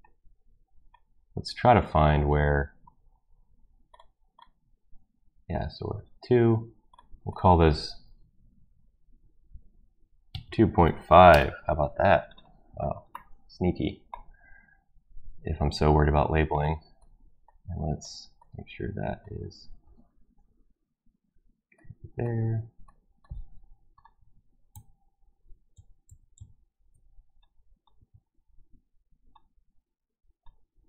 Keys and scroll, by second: 8.7 ctrl+v, 9.7-14.6 typing, 20.2 Escape, 24.7 ctrl+z, 25.3 ctrl+z, 25.7 ctrl+z.